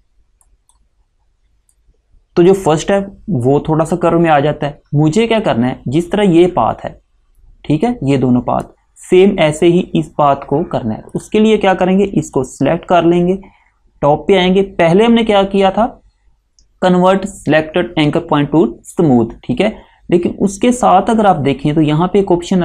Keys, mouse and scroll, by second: 6.2 click, 11.2 click.